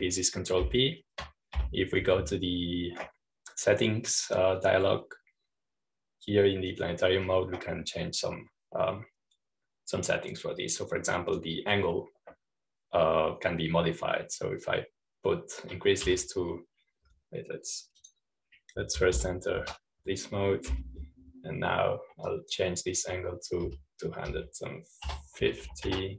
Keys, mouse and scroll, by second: 2.6 ctrl+p, 8.6 click, 13.0 click, 18.0 2, 19.9 click, 21.2 ctrl+p, 22.6 p, 24.2 click, 25.5-26.1 typing.